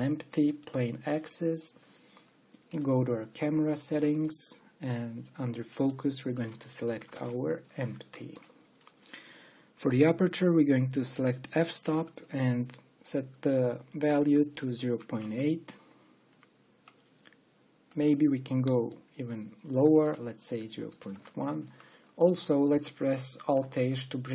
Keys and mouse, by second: 3.5-7.6 drag, 18.6 click, 19.1 click, 19.4 click, 19.8 click, 20.3 click, 20.6 click.